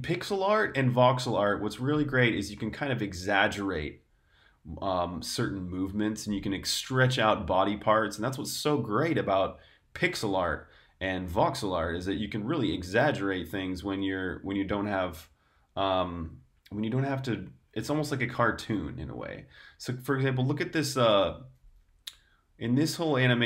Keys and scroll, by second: 21.4 8.